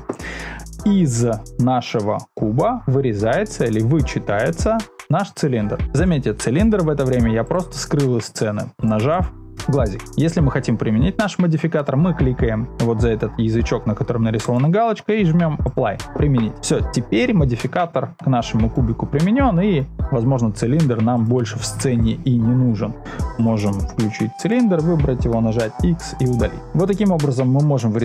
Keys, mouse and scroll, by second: 0.5-4.5 middle drag, 7.4 click, 8.7 click, 9.1 click, 14.5-15.7 drag, 16.5-19.2 middle drag, 21.1 click, 23.3 click, 24.3 click, 25.2 x.